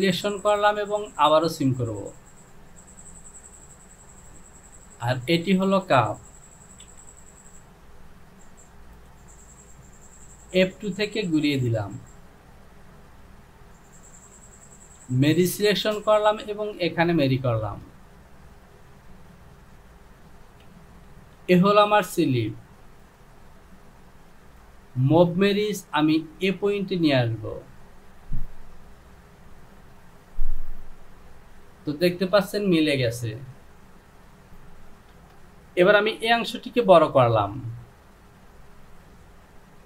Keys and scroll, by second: 7.1 j, 20.6 Home, 34.5 Home, 35.2 Return.